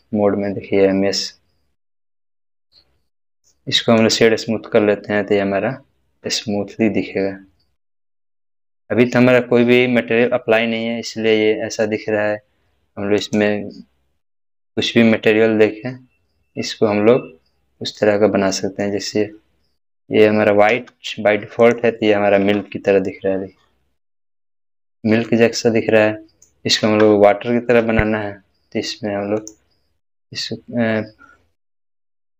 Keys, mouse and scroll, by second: 3.3 right click, 4.0 click, 6.8 click, 6.8-8.0 middle drag, 13.2 middle click, 13.2 click, 17.9 click, 18.0-18.9 middle click, 18.8 scroll down 1, 21.6 click, 22.4 space, 25.3-26.5 middle drag, 26.8 space, 29.4 space, 29.4 click.